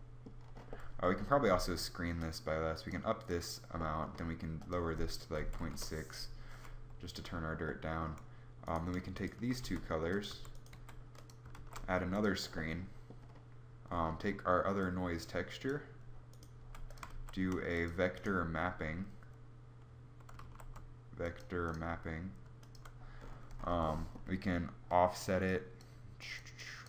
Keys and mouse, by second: 9.3 g, 10.0 a, 10.3 g, 11.5 shift+d, 16.2 g, 16.8 shift+a, 20.2 shift+a.